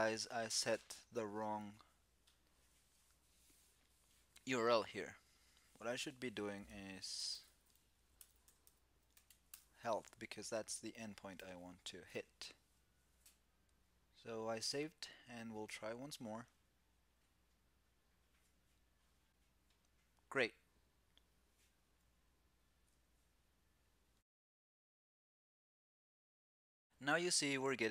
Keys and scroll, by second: 11.1 super+s.